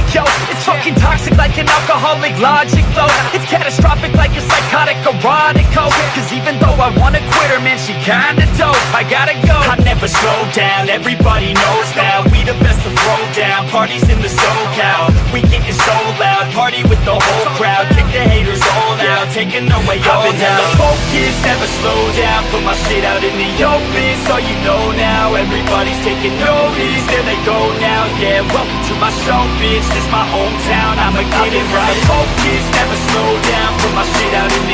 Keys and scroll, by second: 2.7 ctrl+j, 2.8 ctrl+t, 7.7 ctrl+t, 9.1 ctrl+t, 10.1 ctrl+e, 12.5 ctrl+u, 32.4 ctrl+d, 33.9 ctrl+t.